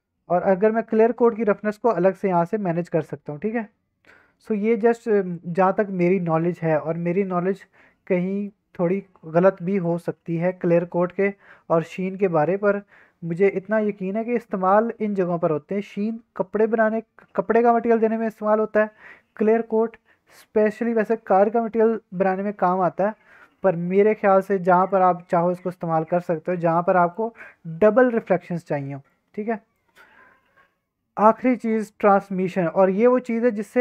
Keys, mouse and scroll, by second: 0.9 middle click, 1.9-5.4 drag, 6.9-7.5 middle drag, 7.5 scroll down 1, 8.4-9.8 middle drag, 9.9-10.3 scroll up 2, 10.3 middle drag, 10.5-11.1 scroll down 2, 11.1 scroll up 2, 14.1-14.6 middle drag, 24.9-27.2 drag, 29.1 click, 31.6 middle drag, 31.9-32.5 scroll down 2, 32.5-33.8 scroll up 2.